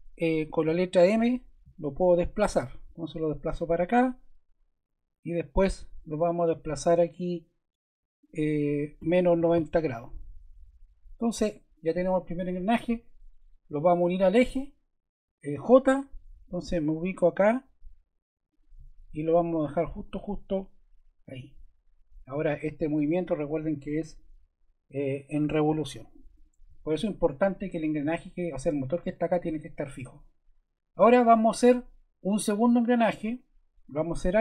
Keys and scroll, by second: 0.6 m, 9.0 -, 9.4 0, 15.5 j.